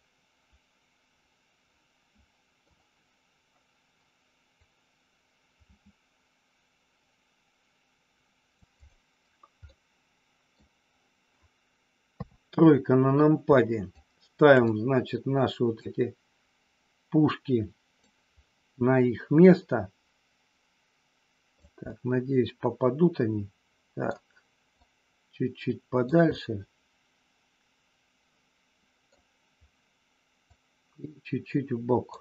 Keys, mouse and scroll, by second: 4.4-8.6 drag, 8.7 click, 9.6-10.6 middle drag, 12.1 KP_3, 14.1 shift+click, 15.9-18.1 drag, 19.4-21.7 drag, 21.8 scroll up 1, 21.9-24.1 middle drag, 24.7-26.1 drag, 26.3 scroll up 1, 26.4-29.1 middle drag, 29.1 scroll down 1, 30.4-32.2 drag.